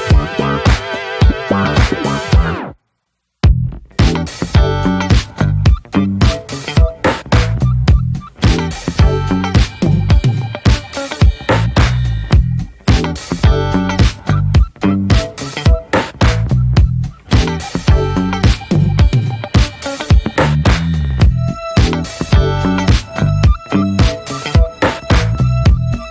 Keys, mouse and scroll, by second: 2.4 middle click, 2.8 click, 2.9-3.3 scroll down 3, 3.1 shift+middle click, 3.5 scroll up 1, 3.7 ctrl+s, 3.8-4.2 shift+middle drag, 4.2-4.5 scroll up 1, 4.5 scroll down 2, 4.7-5.7 shift+middle drag, 5.7 drag, 5.9-6.7 scroll down 3, 6.1 middle click, 6.4 drag, 6.7 middle click, 6.9-7.2 scroll up 2, 7.2 ctrl+s, 7.5-8.1 scroll down 2, 7.7 middle drag, 8.1 click, 8.6 scroll up 1, 8.8 click, 9.3-9.7 scroll up 1, 9.7 ctrl+j, 10.3 click, 10.6-11.0 shift+middle drag, 10.7-11.4 scroll up 2, 11.4-12.5 middle drag, 12.5 ctrl+s, 12.5 click, 13.1 middle click, 13.2 scroll up 1, 13.3-13.9 scroll down 3, 13.4 shift+middle drag, 13.9-14.3 middle drag, 14.3 scroll up 1, 14.4 shift+middle click, 14.6 scroll down 1, 14.8-15.8 middle drag, 15.8 scroll up 1, 16.0 ctrl+s, 16.1 middle click, 16.4 ctrl+s, 17.6-18.0 middle drag, 18.0 scroll up 1, 18.3-20.2 middle drag, 20.2-20.5 scroll up 2, 20.5-21.3 middle drag, 21.3 scroll down 2, 21.5-23.6 middle drag, 23.8 scroll down 3, 24.2 shift+middle drag, 24.4 scroll up 2, 24.7-26.1 middle drag.